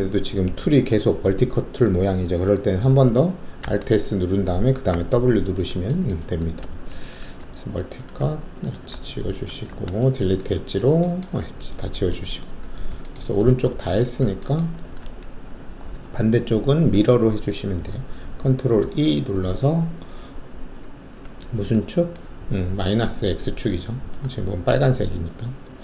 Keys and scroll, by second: 3.6 alt+s, 4.9 w, 6.6 alt+2, 7.4 alt+q, 8.6 alt+q, 13.4 alt+`, 18.7 ctrl+e.